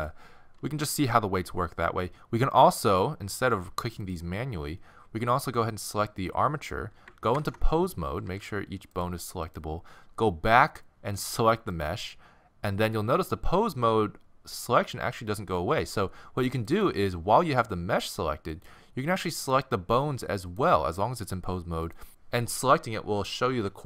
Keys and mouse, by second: 0.0-1.9 right drag, 2.1-2.4 middle drag, 2.5-7.3 drag, 5.6-7.4 right drag, 7.3 ctrl+Tab, 8.1 a, 8.2 a, 8.9-11.5 drag, 11.7-13.6 drag, 13.6-15.8 middle drag, 16.7-22.1 drag.